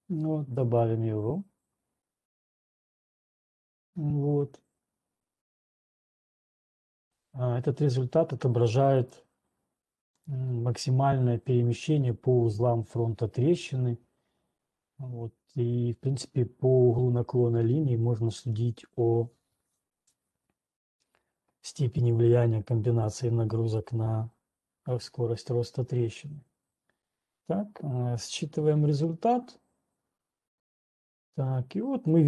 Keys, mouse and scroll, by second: 0.9 click, 9.4 click, 10.9 right click, 24.0 click, 29.4 typing.